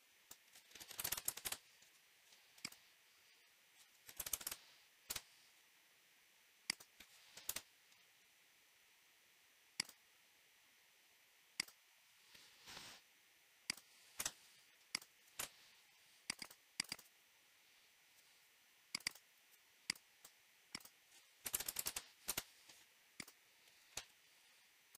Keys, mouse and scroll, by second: 0.3 click, 0.7-1.9 typing, 2.7 click, 3.5-4.9 typing, 5.1 Return, 6.8 click, 7.4 Return, 9.9 click, 11.6 click, 12.7 scroll, 13.7 click, 14.2 Escape, 15.0 click, 15.4 Delete, 16.4 click, 16.5 click, 16.9 click, 17.0 click, 17.7 scroll, 19.0 click, 19.1 click, 20.2 click, 20.8 click, 21.3-22.3 typing, 23.3 click.